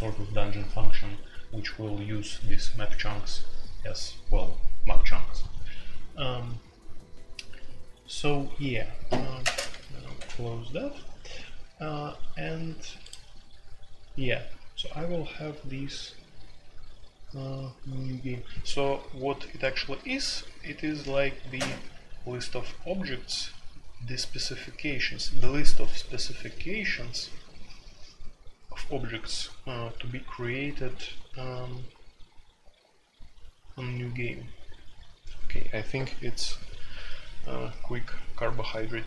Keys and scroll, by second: 9.4-10.1 typing.